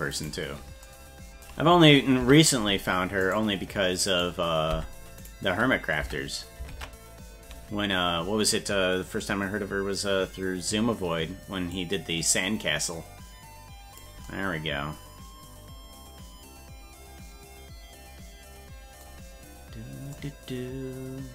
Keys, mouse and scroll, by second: 0.2 right click, 2.2 Tab, 3.3 right click, 4.2 right click, 4.7 Tab, 5.2 right click, 6.1 Tab, 6.7 ctrl+Tab, 11.8-14.0 drag, 19.8 scroll up 2.